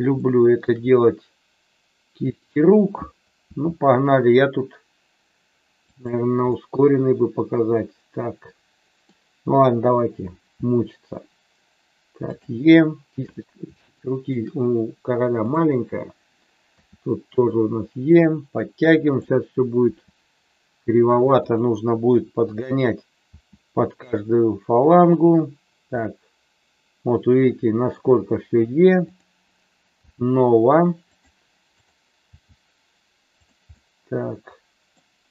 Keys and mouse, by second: 0.2 shift+middle click, 0.8-2.5 middle drag, 3.5 e, 5.8 click, 6.6-9.1 middle drag, 10.6 e, 12.3 click, 13.9 shift+middle click, 15.4 click, 16.7 e, 18.0 click, 19.0 click, 19.7 e, 21.5 click, 22.5 click, 23.3 e, 25.0 click, 26.0-27.9 middle drag, 29.1 click, 30.0 g, 31.1 click, 32.2 g, 33.2 click, 33.7-35.0 middle drag.